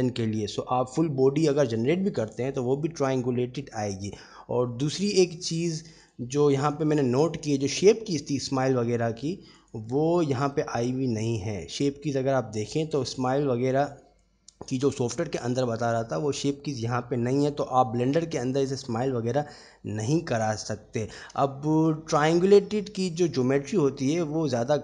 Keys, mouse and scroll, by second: 4.5 Tab, 5.7-7.5 right drag, 8.5 click, 9.9 click, 10.7 click, 11.3 click, 14.1 click, 18.2 click, 19.1-21.2 middle drag, 21.6-22.0 shift+middle drag, 22.4 Tab, 24.3-24.8 drag.